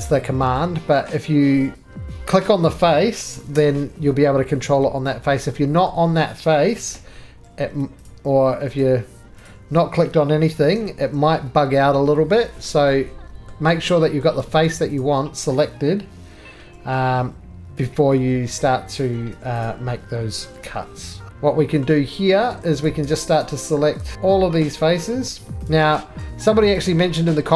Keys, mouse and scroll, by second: 0.0 middle click, 0.1 middle click, 0.5 middle click, 0.7 middle click, 2.4 click, 3.3 ctrl+r, 4.6 Escape, 5.3 middle click, 5.4 middle click, 5.4-6.0 scroll, 6.7 ctrl+r, 6.7-7.3 scroll, 7.7 Escape, 8.0 click, 8.8 click, 9.3 middle click, 9.4 click, 10.5 ctrl+r, 12.1 Escape, 12.4 middle click, 12.4 scroll, 13.4 middle click, 13.6-14.2 scroll, 14.2 middle click, 15.0 click, 16.6 ctrl+r, 17.8 click, 18.6 middle click, 19.6 click, 20.4 ctrl+r, 21.3 ctrl+z, 21.3 click, 21.3 right click, 21.3 middle click, 21.3-21.8 scroll, 21.8-22.8 middle click, 22.1 scroll, 22.5 3, 22.8 click, 23.4 shift+click, 24.0 ctrl+z, 24.0 scroll, 24.1 shift+click, 24.7 shift+click, 25.6 shift+click, 26.8 click, 27.0 middle click, 27.4 middle click.